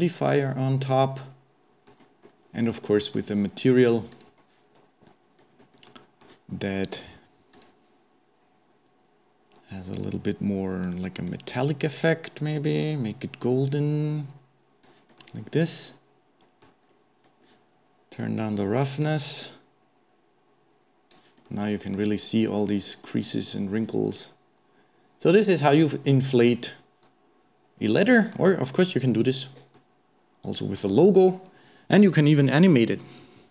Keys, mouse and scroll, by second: 0.3-2.1 middle drag, 2.1-2.4 scroll down 2, 2.4-2.7 scroll up 2, 2.7-4.8 middle drag, 4.8 click, 5.5-5.9 scroll down 1, 5.9-6.9 middle drag, 6.9 click, 7.6-9.3 drag, 10.9-12.7 drag, 15.2-16.9 middle drag, 16.9-18.2 scroll up 1, 18.2 click, 19.0-21.5 drag, 21.5-22.7 middle drag, 22.7-23.1 scroll down 1, 23.1-26.1 middle drag, 29.1-29.7 scroll up 1, 29.7-31.0 middle drag, 31.0-31.4 scroll down 2, 31.4-32.0 scroll up 1.